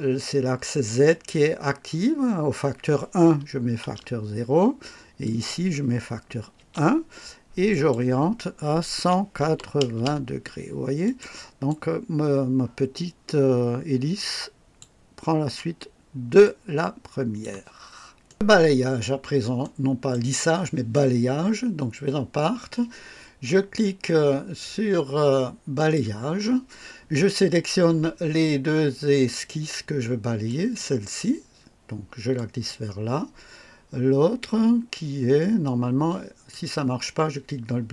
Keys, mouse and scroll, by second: 0.8 click, 3.8 KP_0, 5.2 click, 6.7 KP_1, 7.6 click, 9.0 KP_1, 9.4 KP_8, 9.9 KP_0, 11.0 click, 11.6-14.9 drag, 16.4 click, 18.2 right click, 18.5 scroll up 1, 19.0 scroll down 1, 19.6 right click, 25.8 click, 30.5 click, 32.3 click, 36.5 click.